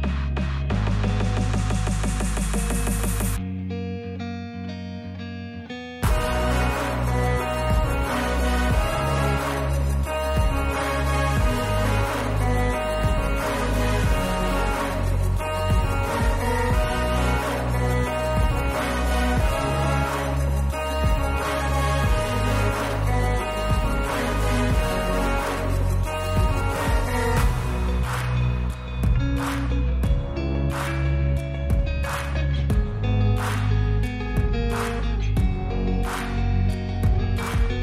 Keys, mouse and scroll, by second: 2.4 space, 4.1 click, 5.4 click, 6.2 click, 8.8 click, 10.9 click, 12.6 click, 14.5 click, 16.6 click, 17.2 click, 17.7 click, 19.3 click, 20.3 click, 21.1 click, 21.5-23.0 drag, 23.4 click, 24.1-25.6 drag, 25.7 space, 28.0 space, 30.3 click, 32.0 click, 33.3 click, 34.1 click, 36.5-37.8 drag.